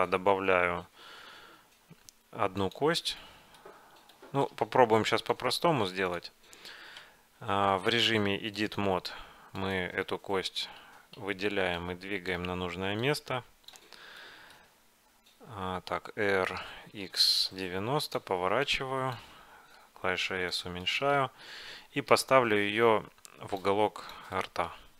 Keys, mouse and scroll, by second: 3.3-6.0 middle drag, 6.0-7.1 drag, 7.1 Tab, 9.0-10.7 drag, 10.9 a, 11.3 a, 11.9-13.1 drag, 13.8 click, 14.3-15.9 middle drag, 16.6 r, 18.7-20.5 drag, 19.9 s, 20.9-22.1 middle drag, 22.1 KP_Decimal, 23.7 click, 24.4-24.9 middle drag.